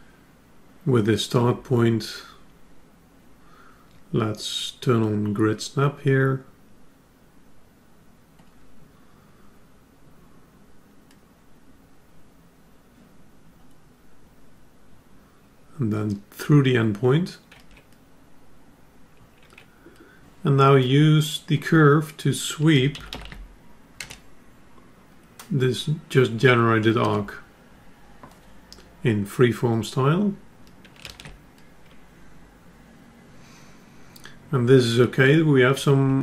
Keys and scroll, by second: 31.3 ctrl+alt+s.